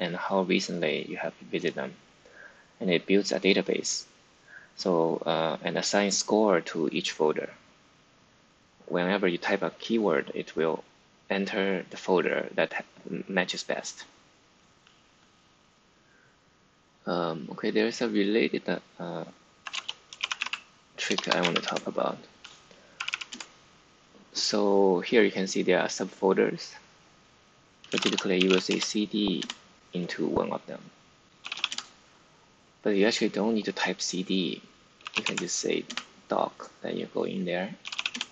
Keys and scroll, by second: 19.3-23.5 typing, 25.5 typing, 27.5-29.1 typing, 29.3 Return, 30.4-31.5 typing, 31.6 Return, 34.7-35.6 typing, 35.8 Return, 37.7 typing, 38.0 Return.